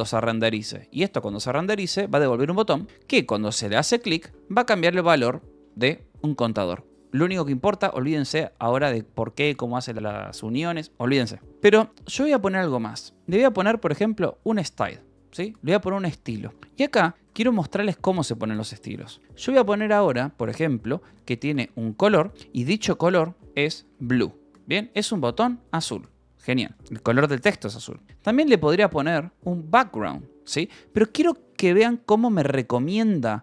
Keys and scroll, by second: 0.9-4.3 typing, 5.5 shift+v, 5.8 Escape, 11.4 h, 12.7-14.3 typing, 14.6 Return, 16.5 space, 17.1 BackSpace, 17.7 shift+[, 17.8 {, 20.8-21.9 typing, 23.6 b, 24.1 Escape, 24.9 l, 25.9 a, 26.6 ,, 26.7 space, 28.2-29.3 typing, 30.3 ctrl+n, 32.8 ctrl+p.